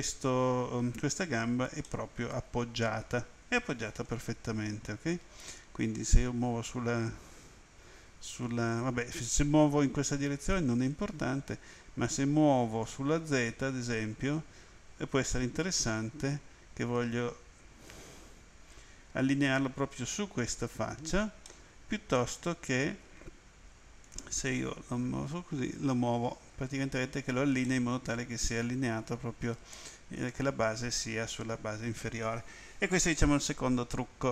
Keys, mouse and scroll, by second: 1.8 middle click, 5.6 click, 12.8 click, 21.4 middle click, 24.0 click, 27.6 middle click.